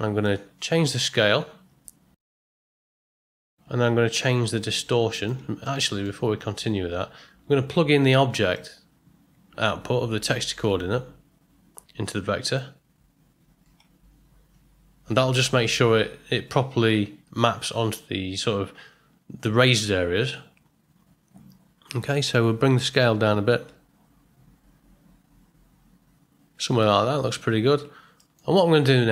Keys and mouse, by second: 0.2-3.1 drag, 4.8 click, 5.6 middle click, 8.6-12.6 drag, 22.9-26.9 drag, 28.2 ctrl+middle click, 28.6 middle click.